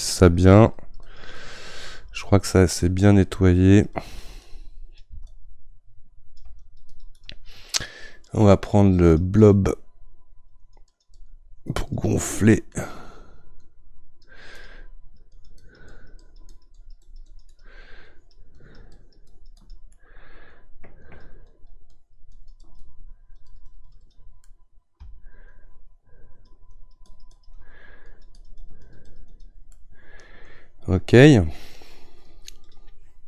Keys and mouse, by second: 2.4-3.7 middle drag, 3.7-13.8 drag, 13.8-15.0 right drag, 15.0-19.9 drag, 19.9-21.0 middle drag, 21.0-24.4 drag, 24.4-25.5 middle drag, 25.5-29.8 shift+drag, 29.8-32.7 middle drag, 32.7-33.2 drag.